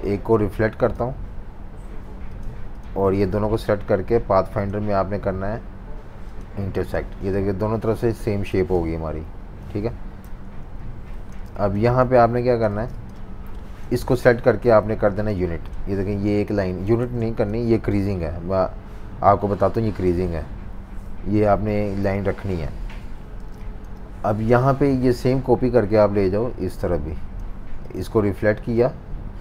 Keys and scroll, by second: 8.7 super+y, 9.6 super+y, 10.2 super+-, 10.4 super+-, 10.6 super+-, 11.4-12.7 typing, 17.0 super+z, 22.4 super+-, 22.6 super+-, 22.8 super+-, 23.4 typing.